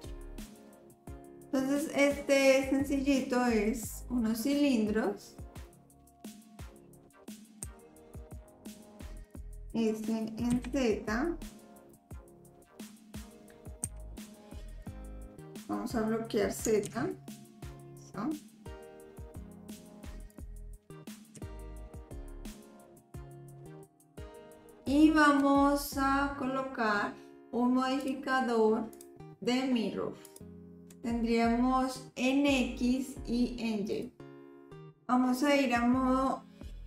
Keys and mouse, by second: 5.6-7.1 drag, 7.7 s, 9.6 s, 13.9 s, 20.8 s, 22.9-24.7 drag, 28.0 click, 29.0-30.4 drag, 34.0 click.